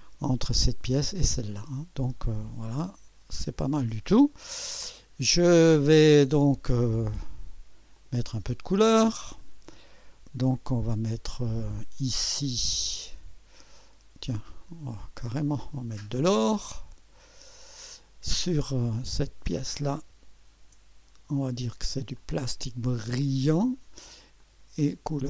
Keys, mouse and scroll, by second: 1.5 scroll down 1, 2.1-5.4 drag, 6.1-6.4 scroll down 1, 6.4 scroll up 1, 6.9-8.3 drag, 9.3 click, 13.0 ctrl+d, 14.6 click, 15.7 click, 17.5 click, 19.0 click, 20.5 ctrl+d, 22.1 click, 23.4 click, 24.4 click.